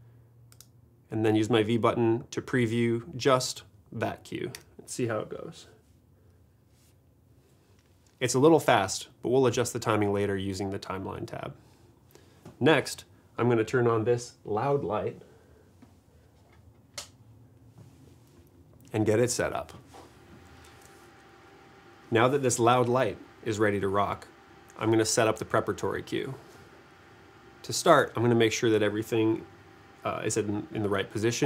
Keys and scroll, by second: 4.6 v.